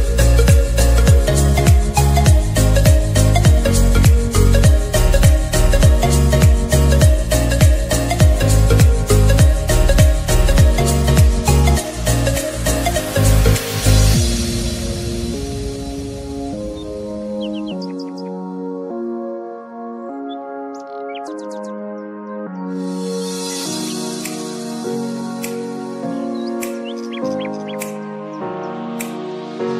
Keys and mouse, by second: 2.1 ctrl+z, 2.8-8.1 drag, 8.1 ctrl+j, 10.7 click, 13.3 click, 13.3 click, 17.6-20.3 drag, 26.4 click.